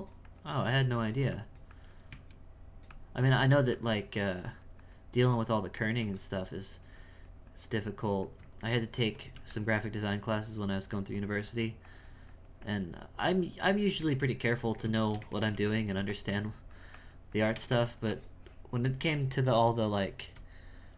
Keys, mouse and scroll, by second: 0.9 f, 1.3 click, 2.1 z, 2.9 click, 3.7-5.1 drag, 5.5 click, 6.0 f, 6.5-8.7 drag, 8.7 ctrl+middle click, 9.3 f, 9.7-14.3 drag, 14.3-15.5 ctrl+middle drag, 15.5 f, 15.9 f, 16.3-19.2 drag, 19.2-20.9 shift+middle drag.